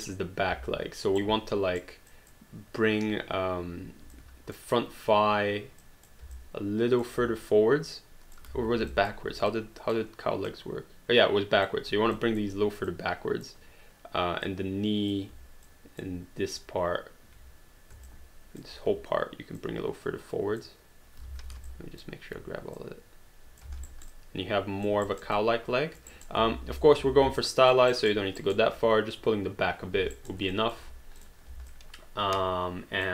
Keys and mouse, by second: 1.2 right click, 2.1 click, 4.1 shift+click, 4.2 click, 5.8 click, 6.4 alt+click, 7.5 click, 8.9 alt+click, 9.5 click, 12.2 click, 14.5 click, 15.6 shift+click, 18.1 shift+click, 19.6 click, 22.8 click, 23.9 alt+right click, 24.2 alt+click, 25.1 alt+right click, 25.4 alt+click, 26.1 alt+right click, 26.6 ctrl+z, 27.2 alt+d, 27.4 alt+click, 27.9 alt+right click, 30.2 alt+right click, 30.5 alt+click, 31.2 click, 31.7 alt+click.